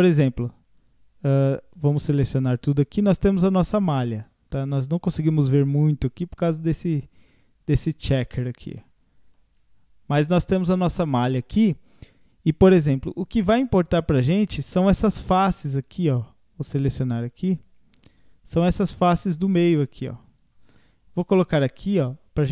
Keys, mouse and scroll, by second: 0.3 Tab, 0.8-1.8 drag, 1.8 a, 2.9-3.5 scroll up 1, 3.5-5.6 middle drag, 5.6-6.4 scroll up 5, 7.0-7.5 scroll down 3, 7.8 click, 8.8-11.8 middle drag, 13.0-16.0 drag, 16.7-18.8 drag, 19.3 shift+click, 19.6-22.5 shift+drag.